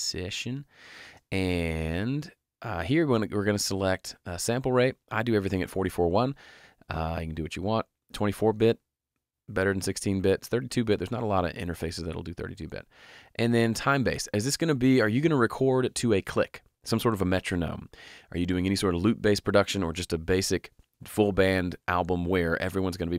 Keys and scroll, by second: 0.0-0.7 typing.